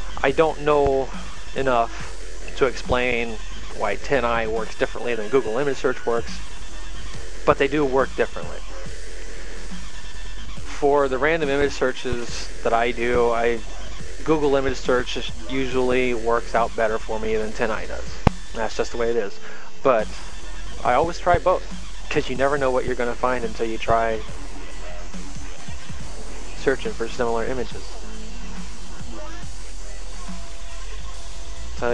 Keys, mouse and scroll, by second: 14.8 click, 18.0 click, 30.2 click.